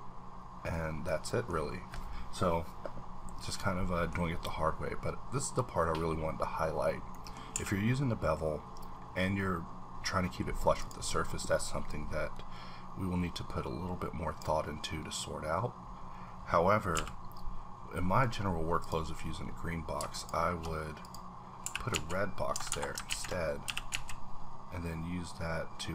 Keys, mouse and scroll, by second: 0.1 middle click, 1.3-1.7 middle drag, 2.0-3.0 scroll down 1, 3.0-3.6 scroll down 1, 3.9 middle click, 7.5 a, 7.7 scroll up 1, 10.8 click, 10.8-11.9 scroll up 1, 12.2-14.5 drag, 16.9 b, 20.1 shift+click, 21.0 shift+click, 21.6 h, 21.9 z, 22.7 Escape, 23.1 ctrl+z, 23.6 g, 23.9 ctrl+z.